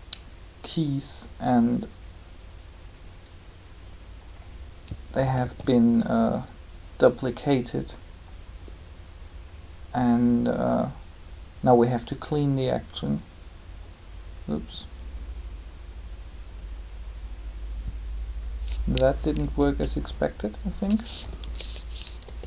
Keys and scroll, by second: 5.2 typing, 19.4 ctrl+z, 21.2 ctrl+u, 22.2 ctrl+z.